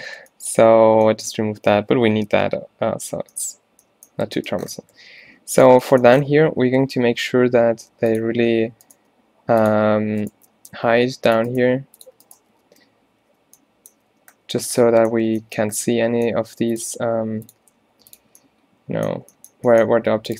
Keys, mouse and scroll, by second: 5.6 middle click, 6.5 shift+Tab, 7.0 z, 7.4 g, 8.4 z, 9.0 g, 10.4 z, 11.0 g, 11.4 click, 11.8 g, 12.7 alt+w, 13.3 f, 14.2 z, 15.4 Tab, 15.7 Tab, 16.7 g, 17.1 r, 17.6 g.